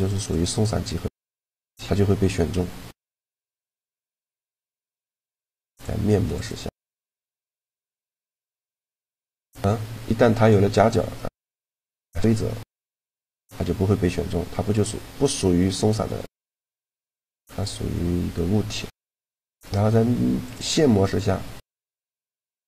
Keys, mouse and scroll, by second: 0.0 click, 0.6-2.1 middle drag, 2.1 a, 2.7-4.4 drag, 3.3-5.0 right drag, 3.7 e, 4.4 a, 6.0-7.9 drag, 8.8 click, 9.7-12.0 middle drag, 14.4 a, 15.7 b, 20.1-22.0 drag.